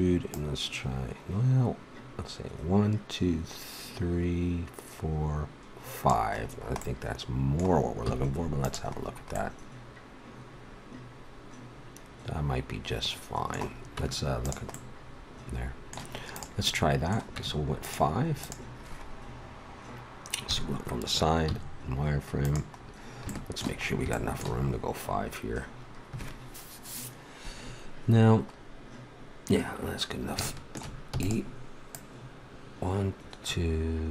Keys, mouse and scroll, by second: 0.3-2.2 drag, 6.3-7.5 middle drag, 8.1 z, 14.0 Tab, 16.3-18.3 drag, 17.3 Tab, 18.4 right click, 20.4 KP_3, 21.5 z, 31.0 e, 31.9-33.8 drag.